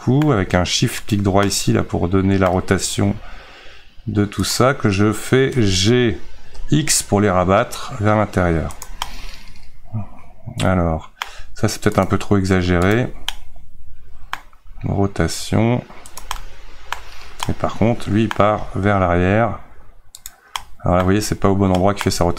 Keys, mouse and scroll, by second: 1.0 shift+right click, 1.5-3.0 middle drag, 3.0 r, 9.1-12.1 middle drag, 12.1 click, 12.8 shift+right click, 13.3-14.6 middle drag, 14.6 r, 16.4-18.5 middle drag, 18.5 r, 20.6 middle click, 21.4-21.8 scroll up 1, 21.8 shift+middle click.